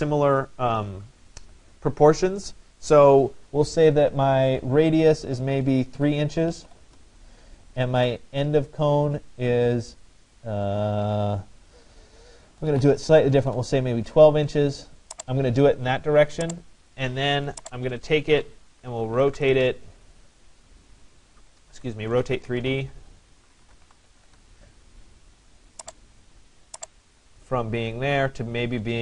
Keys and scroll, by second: 5.6 3, 6.9 Return, 12.2 1, 12.8 2, 13.4 Return, 19.2 Return, 21.8 Escape, 23.9 3, 24.4 Return.